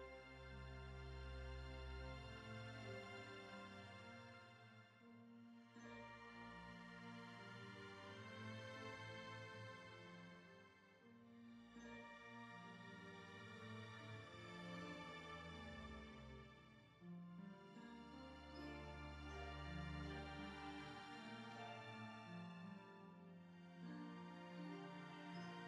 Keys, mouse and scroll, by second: 0.2-0.6 ctrl+KP_Add, 1.0 ctrl+KP_Add, 1.5 ctrl+KP_Add, 2.4-2.8 scroll up 1, 2.8 middle click, 3.5-3.8 scroll down 2, 3.8 middle click, 4.5 s, 6.9 scroll up 1, 7.1-9.9 middle drag, 9.9 s, 10.8 scroll down 2, 10.9-12.4 middle drag, 13.3 alt+click, 13.6 middle click, 14.5-15.6 drag, 15.6 KP_1, 16.1 KP_9, 16.3-16.9 scroll up 1, 16.9 g, 17.8 scroll down 1, 18.0-19.1 shift+middle drag, 19.1 g, 19.9-21.4 middle drag, 21.8-22.7 scroll up 1, 22.7 alt+z, 22.9 3, 23.0 click, 23.3 scroll up 3, 23.5 shift+middle click, 23.8 ctrl+click, 24.1 scroll down 1, 24.2 middle click, 25.1 e.